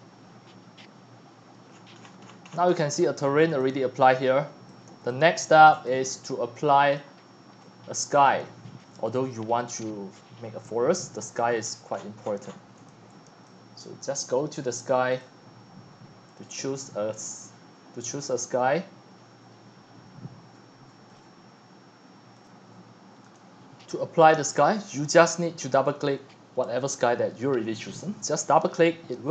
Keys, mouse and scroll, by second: 1.7-2.0 middle drag, 1.7 scroll, 1.7 scroll, 1.8 scroll, 1.8 scroll, 2.0-3.6 scroll down 64, 4.7-5.1 drag, 4.9-11.6 typing, 5.7 click, 8.1-8.5 drag, 11.4 click, 11.7 click, 12.0 middle click, 12.2 shift+click, 13.5-20.3 drag, 21.2 click, 23.3 click, 25.1-29.3 drag.